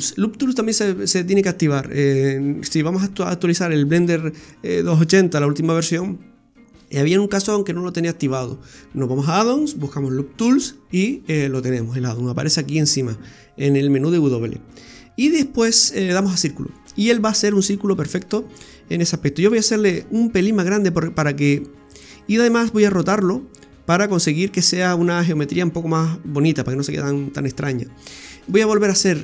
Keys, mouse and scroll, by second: 13.8 w, 18.2-19.4 scroll down 1, 19.9 shift+s, 21.0 s, 23.1 r, 26.3 scroll up 2, 28.6 shift+s.